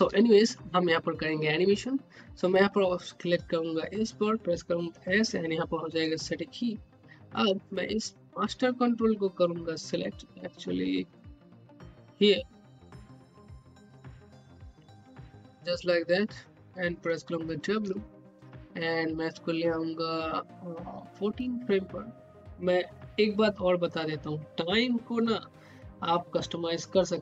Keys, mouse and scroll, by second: 1.4 scroll down 1, 3.6 click, 4.9 s, 7.6 click, 8.6 scroll up 1, 9.0 alt+middle click, 9.4 scroll up 1, 9.7 alt+middle click, 10.2 scroll down 1, 10.6 alt+middle click, 11.1 scroll up 1, 12.5 click, 12.8 scroll down 1, 13.7 alt+middle click, 14.0 scroll down 1, 14.4 alt+middle click, 15.3 scroll down 1, 15.7-17.3 alt+middle drag, 17.3 w, 21.4 click.